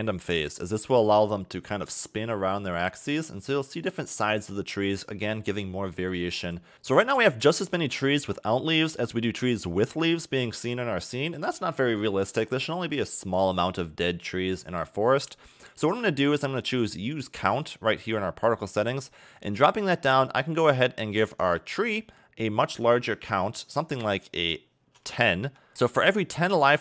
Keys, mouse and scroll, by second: 1.4 click, 6.5 click, 6.7 scroll down 2, 6.9 a, 7.1 a, 7.5-8.5 scroll up 3, 11.1-12.7 scroll down 3, 15.7-16.9 scroll down 3, 16.9-17.3 scroll down 1, 18.3 click, 18.7 click, 19.4 scroll down 3, 21.3 click, 22.6 click.